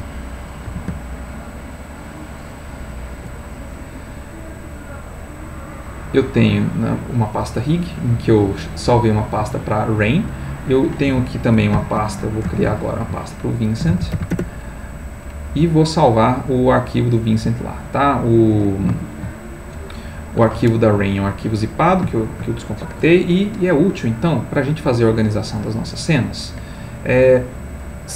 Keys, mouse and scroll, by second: 1.1 alt+Tab, 6.3 click, 9.2 click, 10.6 click, 11.7 ctrl+shift+n, 12.6-14.1 typing, 14.3 Return, 15.8-17.1 drag, 18.7 shift+click, 21.5 click, 22.2 shift+click, 23.0 Delete, 24.3 click, 25.6 click, 26.4 click.